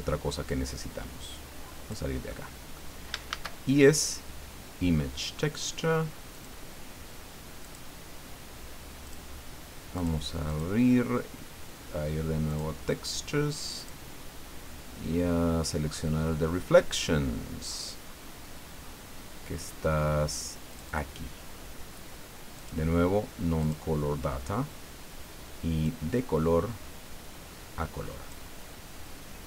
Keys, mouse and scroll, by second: 2.3 click, 3.3 shift+a, 6.3 click, 7.6 click, 9.0 click, 9.9 click, 10.4 click, 12.5 click, 13.7 click, 14.3-19.7 scroll down 20, 20.7 click, 22.6 click, 23.6 click, 25.8-28.5 drag.